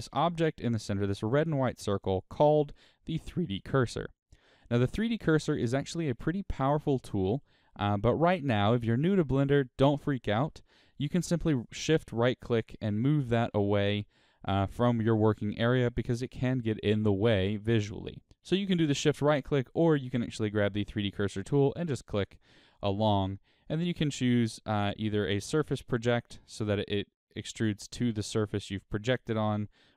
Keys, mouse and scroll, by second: 1.3-2.7 right drag, 4.7-12.2 shift+middle drag, 12.2 shift+right click, 13.2 shift+right click, 14.6-20.4 middle drag, 15.5-16.9 scroll down 2, 20.4 drag, 21.1 click, 21.6 click, 22.0 drag, 22.4 click, 22.8 click, 26.1 click, 27.2 click, 28.1 click.